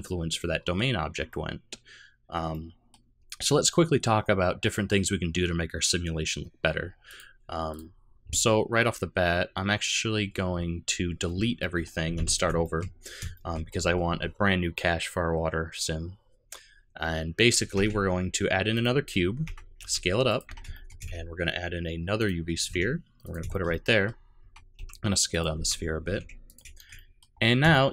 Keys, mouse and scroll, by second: 0.3 middle click, 1.3 middle click, 2.5 middle click, 7.0 click, 7.7 click, 11.6 middle click, 12.0 a, 12.1 x, 12.6 shift+middle click, 13.4 middle click, 13.6 middle click, 17.7 shift+a, 19.4 Tab, 19.7 s, 20.4 Tab, 20.7 shift+middle click, 21.0 shift+a, 22.6 g, 23.5 shift+middle click, 23.7 middle click, 24.4 Tab, 24.7 s, 25.5 Tab, 26.0 g, 26.7 shift+middle click, 26.9 middle click, 27.3 scroll up 2, 27.7 shift+middle click.